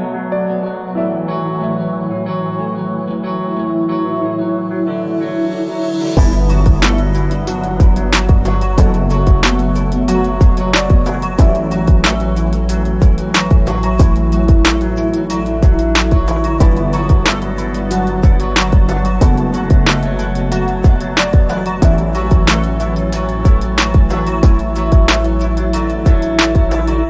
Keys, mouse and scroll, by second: 0.3-1.3 alt+scroll up 2, 1.3 click, 8.4 scroll down 1, 8.8 scroll up 1, 10.7 click, 15.6 click, 21.2 alt+scroll down 1, 22.9 click.